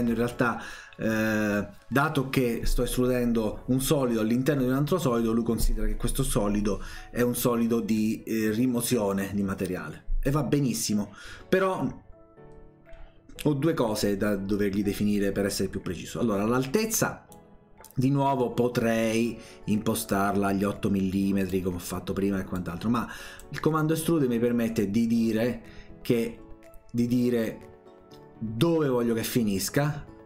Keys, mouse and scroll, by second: 17.3-21.5 drag, 22.5 click, 29.3 click.